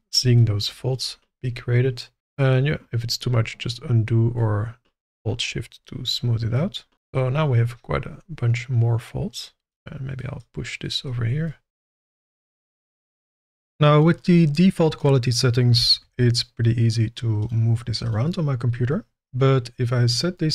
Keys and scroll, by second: 2.2 ctrl+z, 15.7 g, 16.0 shift+z.